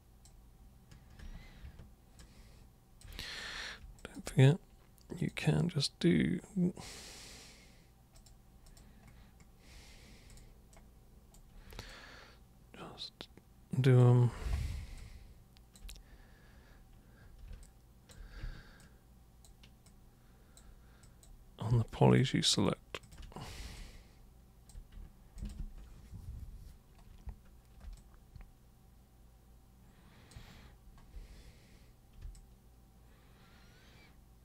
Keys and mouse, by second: 2.2-3.0 ctrl+shift+super+drag, 4.0 alt+super+click, 5.2 super+click, 8.1 super+click, 8.6 super+click, 10.3 super+click, 10.7 super+right click, 11.9-14.0 alt+super+drag, 14.9 alt+super+click, 17.6-18.1 alt+super+drag, 18.8-19.4 shift+super+drag, 19.9-20.6 shift+super+drag, 21.0 shift+click, 22.1 shift+click, 22.5 shift+click, 23.0 shift+click, 23.7-24.7 alt+drag, 25.4 ctrl+click, 28.0-30.3 alt+super+drag, 32.3-34.4 alt+super+drag.